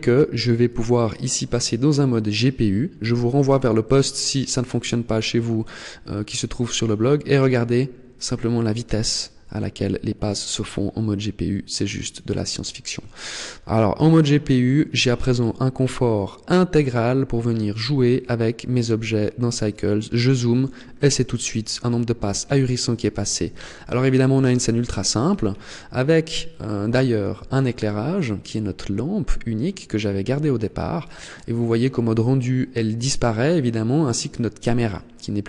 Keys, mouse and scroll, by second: 0.4 click, 12.9 middle click, 14.4 middle click, 18.7 scroll up 2, 24.8-25.3 scroll down 6, 25.5 middle click, 27.1-27.6 scroll down 3, 28.1-30.0 scroll down 3, 30.4-30.7 scroll up 4, 34.9 middle click.